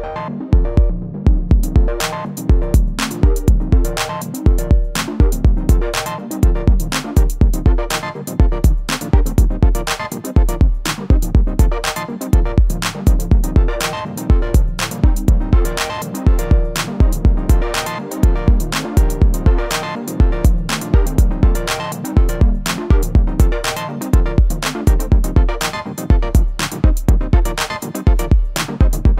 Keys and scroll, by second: 14.3 s, 14.6 z, 18.7 3, 21.2 s, 22.6 y.